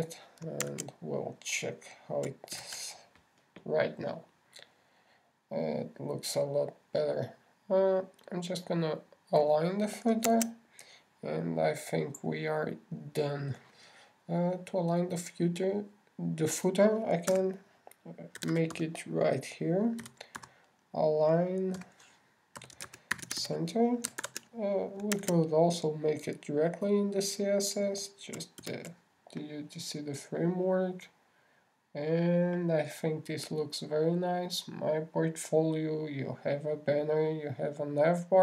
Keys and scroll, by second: 0.9 super+s, 2.1 super+Tab, 3.9 super+r, 11.7 super+Tab, 25.5 super+r, 25.6 super+s, 26.5 super+Tab, 30.0 super+r.